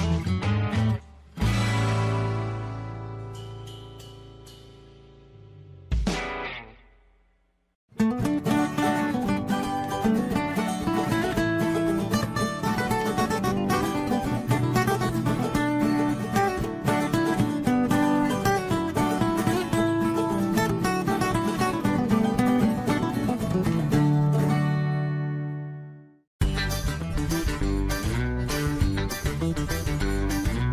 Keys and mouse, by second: 0.5 1, 2.8 click, 6.2 shift+middle click, 9.8 shift+middle click, 10.5 click, 12.2 click, 14.0 middle click, 15.2 shift+middle click, 16.0 shift+middle click, 16.2 middle click, 17.0 Tab, 17.6 shift+middle click, 18.6 click, 19.2-20.5 middle drag, 20.7 Tab, 21.4 middle click, 23.7 shift+middle click, 24.6 click, 25.4 shift+middle click, 28.4-29.6 shift+middle drag.